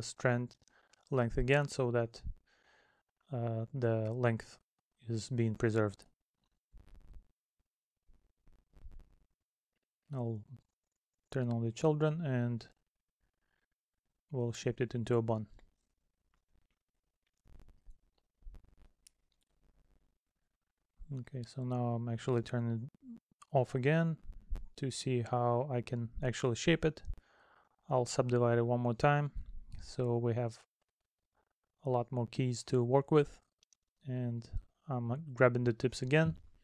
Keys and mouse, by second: 5.3 middle click, 7.1 middle click, 8.2 middle click, 11.8 middle click, 13.2 middle click, 18.7 middle click, 20.3 middle click, 21.5 middle click, 22.4 middle click, 23.4 middle click, 26.8 middle click, 29.7 middle click, 31.1 middle click, 32.1 middle click.